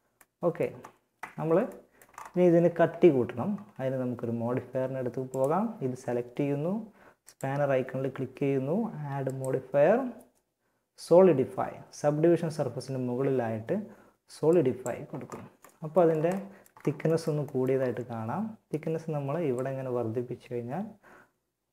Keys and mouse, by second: 0.4 Tab, 14.5 middle click, 18.7-20.7 drag.